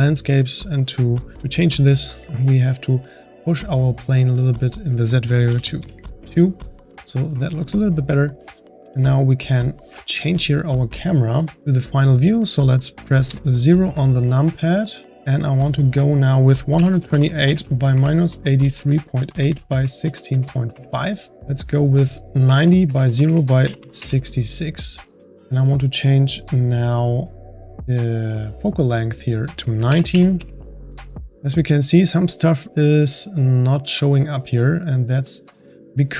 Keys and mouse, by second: 0.5 click, 4.5-8.7 drag, 9.5 click, 15.2 KP_0, 15.8-19.4 drag, 21.7-23.7 drag, 23.7 KP_6, 25.2-27.6 drag, 29.2-32.4 drag.